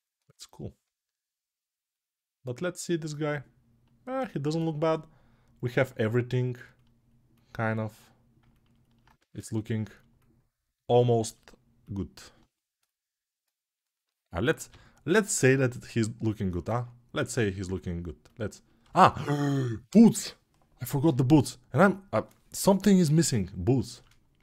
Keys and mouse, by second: 4.8-14.4 alt+drag, 9.0 ctrl+space, 14.4-24.3 middle drag, 14.4 g, 24.3-24.4 drag.